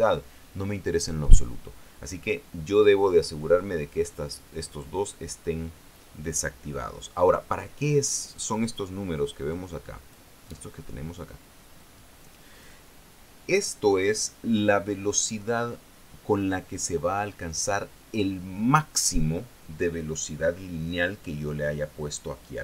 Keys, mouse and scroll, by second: 10.0 click, 12.3 click.